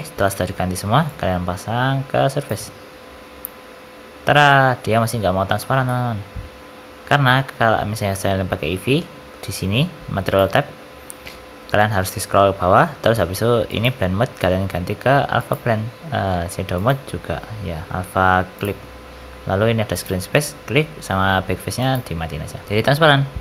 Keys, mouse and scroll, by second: 0.2 middle click, 1.0 click, 4.3 middle click, 5.1-5.5 scroll up 2, 5.5 shift+middle click, 5.8 middle click, 10.2 click, 11.3-12.9 scroll down 12, 12.9 scroll down 1, 13.6 click, 16.7 click, 19.9 click, 21.8 click, 22.6 middle click, 22.6 shift+middle click.